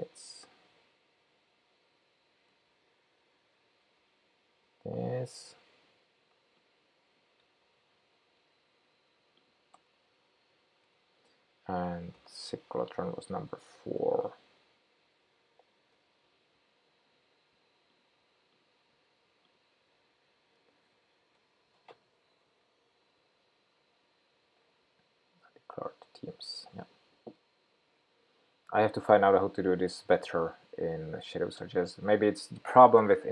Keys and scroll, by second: 3.5 shift+super+p, 7.6 super+c, 10.4 super+v, 13.5 ctrl+k, 15.5 shift+super+p, 20.3 shift+super+p.